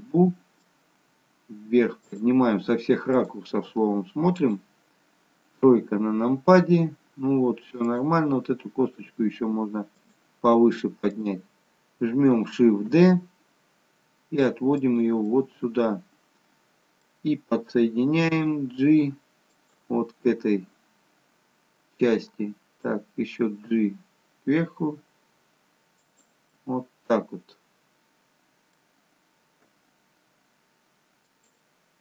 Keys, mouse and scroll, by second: 1.2 g, 3.4 click, 3.6 g, 5.7 KP_3, 8.0 click, 9.1 g, 11.2 click, 12.8 shift+d, 15.4 middle click, 20.5 middle click, 20.5 g, 26.7 middle click.